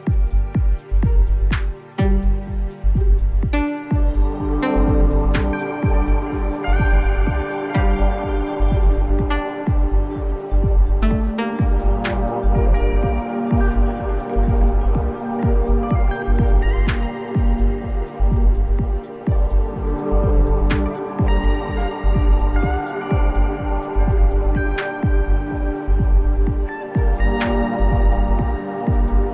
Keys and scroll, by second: 0.7 ctrl+KP_0.